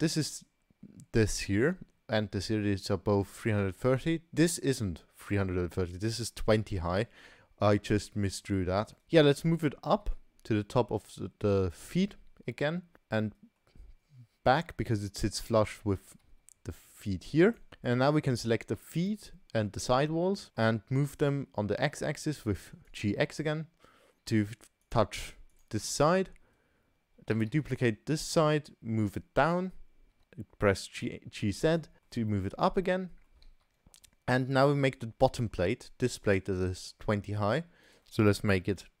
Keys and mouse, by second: 8.9 middle click, 9.9 g, 13.2-13.6 middle drag, 15.2 g, 17.9-18.2 drag, 18.9 shift+click, 20.4 middle drag, 21.8 g, 23.4-24.1 middle drag, 25.5 click, 25.9-26.3 middle drag, 27.3 shift+d, 30.1 g, 32.0 middle click, 32.9-33.2 middle drag, 33.4 shift+a, 38.1-39.0 drag.